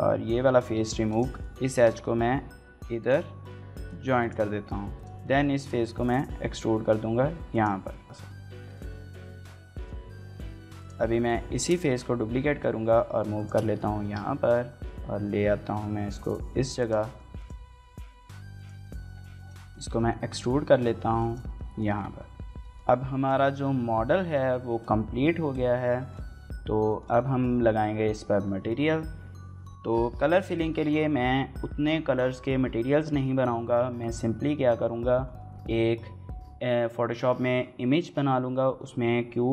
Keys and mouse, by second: 1.2-1.6 typing, 2.8 right click, 3.1 g, 3.4 y, 4.0 click, 4.5 3, 4.7 click, 5.0 middle click, 5.5 e, 7.3 click, 7.7 middle click, 8.2 alt+s, 8.7 shift+click, 8.9 middle click, 9.5 Tab, 9.6 shift+middle drag, 10.0 shift+click, 10.4 shift+click, 11.0 Tab, 11.0 click, 11.3 shift+d, 12.3 x, 13.2 shift+click, 13.4 middle click, 14.0 x, 14.0 g, 14.7 y, 15.2 y, 16.6 click, 16.9 middle click, 17.2-21.5 typing, 17.6 shift+middle click, 18.1 click, 18.3 right click, 18.7 click, 19.9 shift+middle click, 20.2 middle click, 20.5 click, 21.2 middle click, 21.3 shift+middle click, 21.8 click, 21.9 middle click, 22.3 Tab, 22.3 shift+middle click, 22.4 click, 22.5 shift+middle drag, 23.0 shift+click, 23.2 click, 24.5 shift+click, 25.8 shift+click, 26.7 shift+middle click, 27.0 middle click.